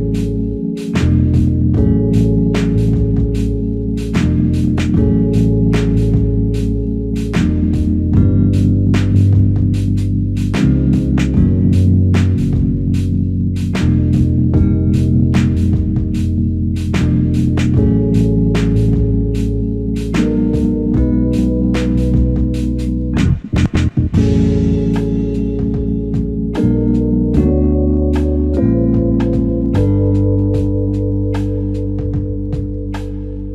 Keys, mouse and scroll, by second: 0.1-0.9 scroll up 1, 1.2-1.8 ctrl+scroll down 1, 17.6 double click, 22.3-23.0 ctrl+scroll up 1, 24.3 ctrl+scroll down 1, 27.7 ctrl+scroll up 1.